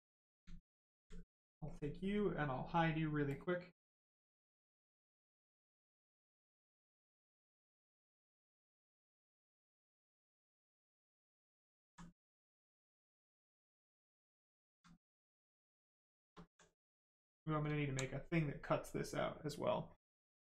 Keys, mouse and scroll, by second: 0.6 alt+click, 1.7 click, 5.8 click, 10.1 click, 11.7 alt+click, 12.1 right click, 14.4 alt+click, 15.0 right click, 15.9 shift+right click, 16.4 alt+right click, 17.1 right click, 17.2 right click, 17.8 alt+right click, 18.8 right click, 18.9 right click.